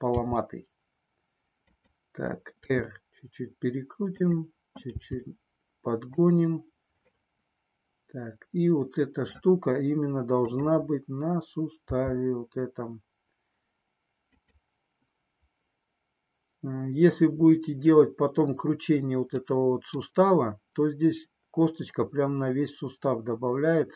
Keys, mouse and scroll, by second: 0.1 g, 1.8 click, 2.6 r, 4.1 click, 4.8 g, 6.3 click, 7.4-9.5 middle drag, 10.4 click, 11.9 g, 14.4 click, 19.6 middle click.